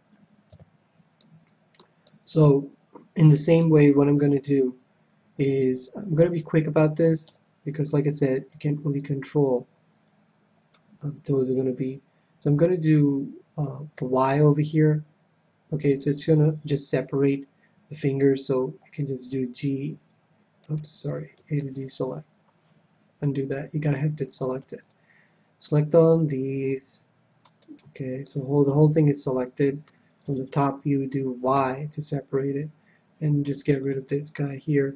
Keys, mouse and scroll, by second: 0.4 KP_7, 1.2-5.3 middle drag, 4.2 KP_7, 7.0 a, 7.2 a, 8.5 c, 11.4-13.3 right drag, 13.9 y, 19.2 g, 20.7-22.4 right drag, 21.6 ctrl+z, 23.8-25.5 drag, 24.6 c, 27.7-29.4 right drag, 28.2-29.8 middle drag, 30.2 KP_7, 31.5 y, 32.3 y, 33.7-34.9 drag.